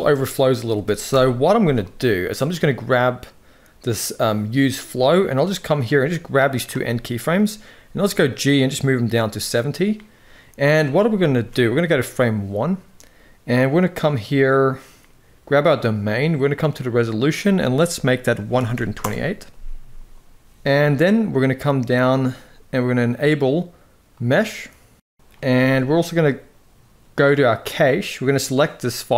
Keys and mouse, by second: 0.8 shift+Left, 2.1 click, 5.7-6.3 drag, 6.6 middle click, 7.5 g, 11.1 ctrl+s, 15.2 click, 16.8-19.4 drag, 25.3 ctrl+s, 27.7 click.